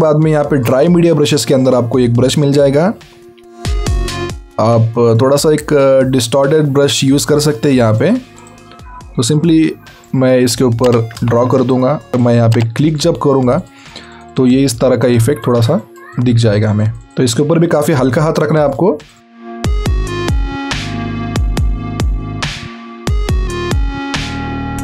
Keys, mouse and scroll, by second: 0.2 click, 5.1 click, 9.9 click, 13.9 ctrl+z, 14.1 right click, 14.8 click, 21.4 scroll down 1, 21.5 scroll up 1, 21.8 click, 24.0 click, 24.2 alt+scroll down 1, 24.3 alt+scroll up 1, 24.4 click.